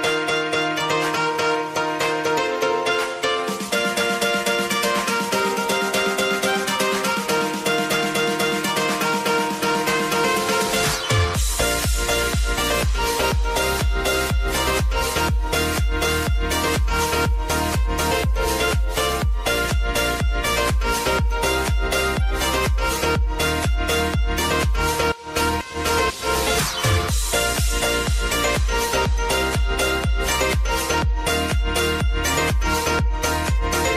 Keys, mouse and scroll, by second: 0.4 Page_Down, 1.2 click, 1.7 [, 2.1 Page_Down, 2.9 click, 3.4 [, 3.8 Page_Down, 4.6 click, 5.1 [, 5.5 Page_Down, 6.4 click, 6.9 [, 7.4 Page_Down, 8.2 click, 9.3 Page_Down, 10.6 click, 10.8 [, 11.8 click, 12.2 space, 14.8 space, 15.3 click, 16.6 space, 19.3 space, 21.7 click, 22.4 ctrl+d, 23.5 s, 24.3 click, 27.6 -, 27.9 Return, 29.1 p, 29.8-33.9 drag.